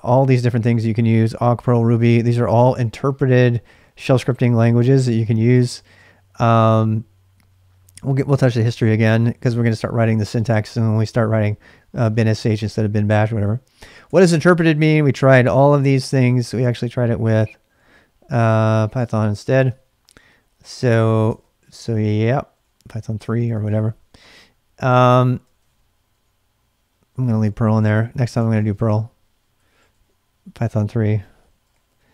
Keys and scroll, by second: 0.0-1.4 typing, 5.3 j, 6.4-9.3 typing, 13.4-32.1 typing, 20.1 ctrl+[, 21.3 ctrl+[, 21.3 ctrl+k.